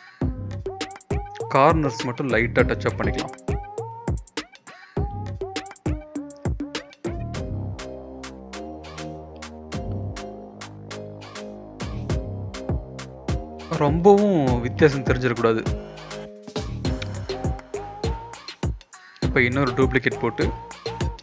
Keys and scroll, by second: 1.2 [, 1.4 [, 5.6-6.5 typing, 7.5-8.5 typing, 11.1 ctrl+z, 11.3 ctrl+z, 12.1 ctrl+z, 12.2 ctrl+z, 12.7 ctrl+z, 13.8 ctrl+shift+z, 17.1 ctrl+z, 17.9 ctrl+z, 19.6-20.3 typing.